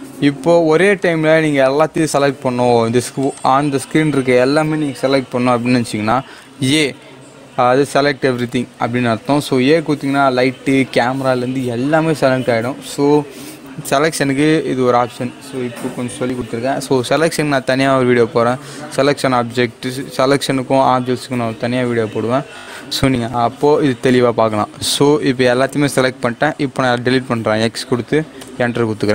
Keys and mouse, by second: 6.5 a, 26.8 x, 28.3 Return.